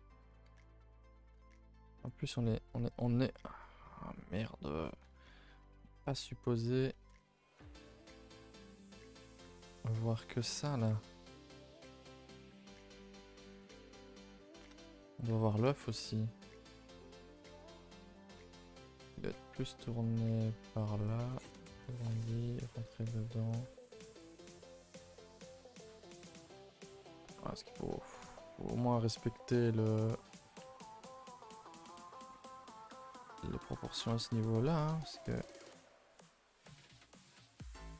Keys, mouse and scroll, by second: 0.4 r, 1.3 g, 3.0 click, 4.7-5.0 scroll up 1, 5.0 Tab, 5.3 scroll up 1, 5.5 a, 5.7 a, 6.1 alt+click, 7.1 s, 7.8 s, 9.3 g, 12.4 g, 13.6 s, 14.2 g, 14.8 shift+middle click, 15.1 scroll up 1, 15.3 Tab, 15.5 click, 15.9 shift+middle click, 16.6 g, 17.5 s, 18.6 r, 21.4 s, 22.0 g, 23.0 r, 23.6 g, 25.2 a, 25.3 a, 25.8-26.6 scroll down 2, 26.6 click, 26.8 shift+middle click, 27.3-27.8 scroll up 2, 28.1 scroll down 2, 28.4 shift+middle drag, 28.7 scroll up 2, 30.6 Tab, 31.1 click, 31.4 click, 31.6 g, 32.8 click, 32.9 g, 33.8 click, 34.1 ctrl+z, 34.6 click, 35.0 shift+click, 35.3 g, 37.5 click, 37.6 g.